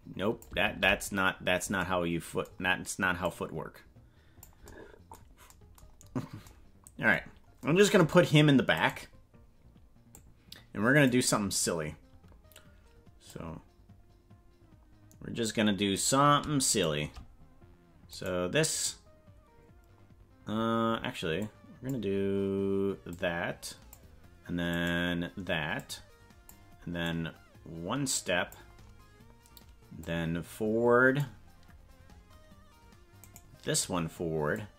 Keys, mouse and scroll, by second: 0.8 ctrl+z, 3.2-4.4 drag, 6.1 scroll up 1, 7.3 scroll down 2, 8.8 right click, 10.1-11.2 drag, 13.4-15.6 drag, 16.0 right click, 16.8 shift+right click, 18.2 right click, 21.5 click, 23.1 click, 24.8 right click, 25.7 click, 27.2-28.6 drag, 30.0-31.2 drag, 33.3 right click, 34.5-34.7 drag.